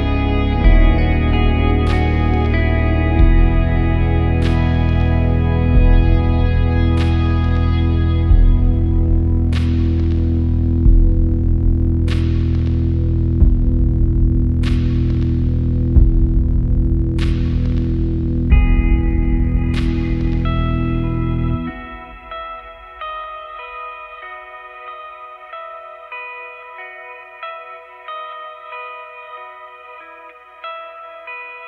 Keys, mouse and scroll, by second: 3.3 alt+click, 11.1 click, 19.1 click, 20.6 click, 23.0-24.2 drag, 24.9 click, 26.5 click, 31.3-31.6 drag.